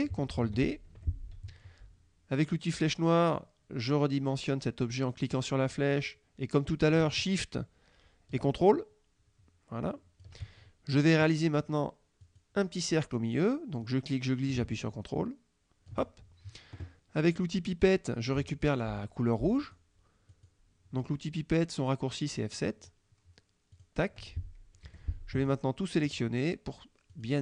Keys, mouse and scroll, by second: 0.5 ctrl+d, 1.0 ctrl+F1, 5.2-10.5 drag, 12.3 click, 13.9-16.1 drag, 18.7 click, 19.6 click, 20.3 click, 23.8 click, 24.9 F1, 25.6 click, 27.2 click.